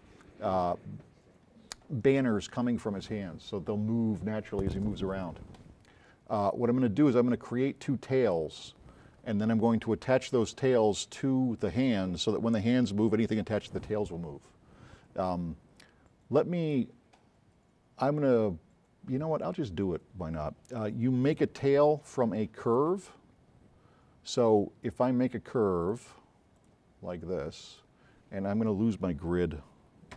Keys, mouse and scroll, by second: 16.7 click, 20.4-21.1 scroll up 4, 23.3 middle click, 24.4 click, 26.7 click, 27.3 middle click, 27.7 middle click.